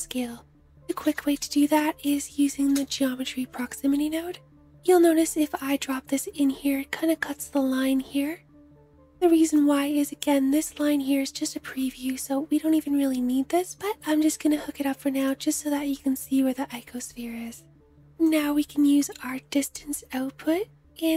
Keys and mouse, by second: 0.7 shift+a, 9.0-15.0 middle drag, 13.8 g, 17.8-21.1 middle drag.